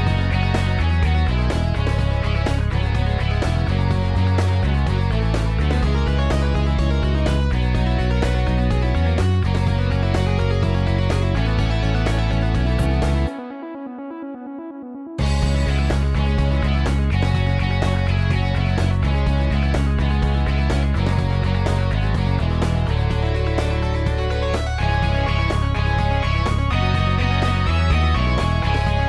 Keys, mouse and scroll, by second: 0.0-1.4 typing, 6.5 0, 7.3 F12, 10.9 typing.